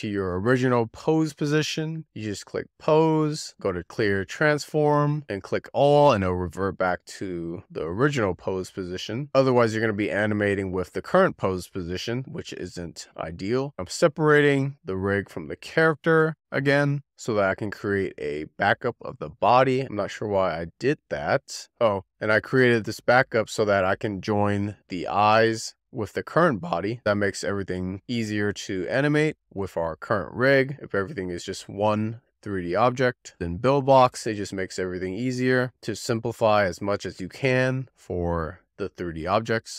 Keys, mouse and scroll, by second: 2.8 a, 3.8-10.5 drag, 11.3-11.8 scroll down 1, 13.4 z, 13.9-14.9 drag, 14.9 a, 15.9 ctrl+p, 17.1 alt+p, 19.8-20.7 scroll up 2, 20.7-21.3 scroll down 2, 21.8 shift+d, 21.9 click, 22.2 n, 22.4 r, 22.8 scroll down 2, 23.0 click, 23.3 click, 24.2 click, 25.2-30.0 right drag, 32.7 click, 33.1 click, 33.9 click, 35.2 click, 38.1 shift+click, 38.7 ctrl+p, 39.5 click.